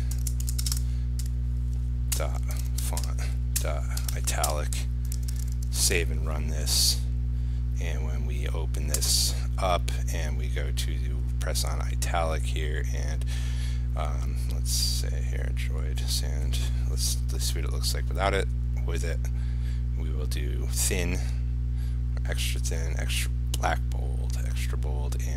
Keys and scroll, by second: 0.8 ctrl+space, 5.3 ctrl+s, 6.0 ctrl+r.